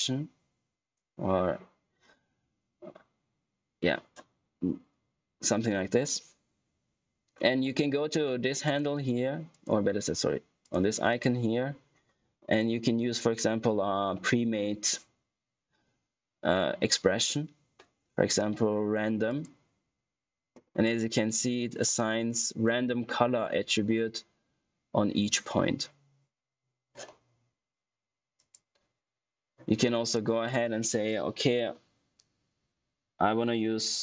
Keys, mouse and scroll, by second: 8.6 click, 20.3 click, 22.0-22.8 scroll up 1, 28.3 click.